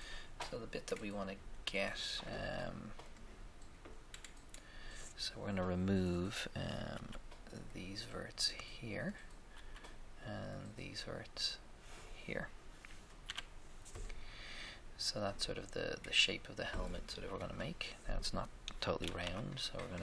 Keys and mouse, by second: 6.9 b, 7.1 b, 9.5 b, 13.2 x, 17.3 KP_1, 17.3 1, 19.2 a.